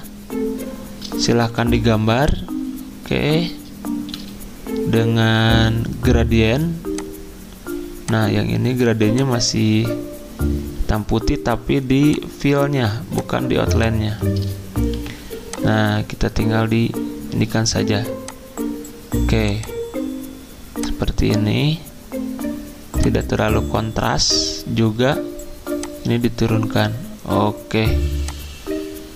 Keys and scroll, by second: 1.5 m, 4.1 d, 14.9 g.